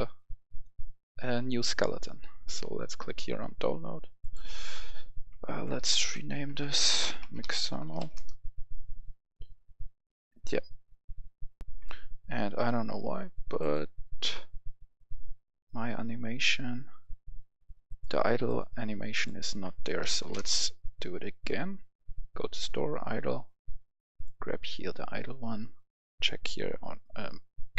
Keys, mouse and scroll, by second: 5.4 Right, 5.7 BackSpace, 7.1-7.9 typing, 8.0 Return, 11.5 click, 11.5 F10, 13.5 click, 19.8-20.5 typing, 24.0 click.